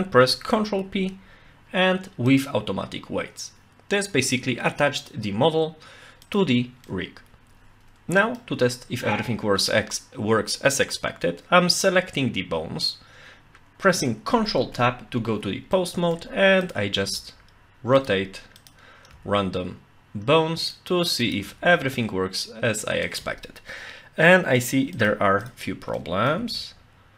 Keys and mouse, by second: 0.8 ctrl+p, 6.3 click, 6.9-8.4 middle drag, 14.6 ctrl+Tab, 15.8-16.2 middle drag, 16.6 click, 16.9 r, 18.0 right click, 18.6 click, 19.1 r, 20.7-21.2 right drag, 21.2 click, 21.5 r, 23.1 right click, 25.4 drag, 25.9 middle click.